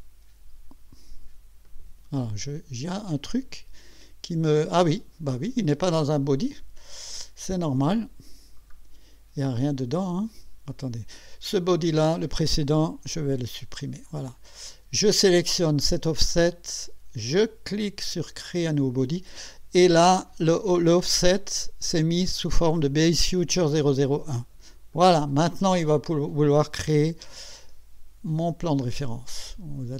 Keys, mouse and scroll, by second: 1.7 click, 2.2 click, 3.1 click, 3.9 click, 5.5 click, 7.8 click, 8.7 scroll down 1, 11.8 click, 13.1 Delete, 15.2 click, 17.8 click, 24.9 click, 26.1-26.8 drag, 27.0 1, 28.8 click.